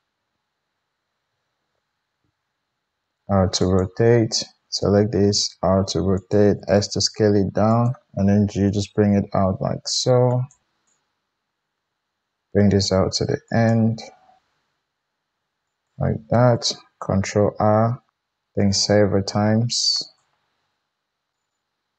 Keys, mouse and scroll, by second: 1.2 a, 2.0 g, 2.5 r, 3.3-4.5 middle drag, 4.5-6.3 drag, 5.0 r, 6.3 middle click, 6.5 s, 7.7-10.6 middle drag, 8.1 g, 10.6-13.7 drag, 11.7 g, 13.7 middle click, 14.4 click, 15.9-21.9 middle drag, 17.1 ctrl+r.